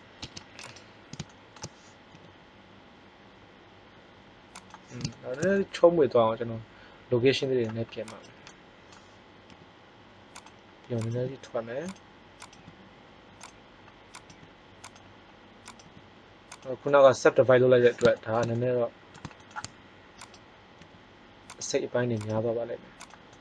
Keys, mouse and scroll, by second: 0.1 Tab, 2.0 g, 4.6-6.1 drag, 8.1-9.8 drag, 9.4 g, 10.9 click, 11.1 g, 11.5 click, 12.4 g, 14.0 click, 14.2 g, 15.7 g, 16.7 middle click, 20.2 right click, 20.7 g, 22.3 g, 23.2-23.4 middle drag.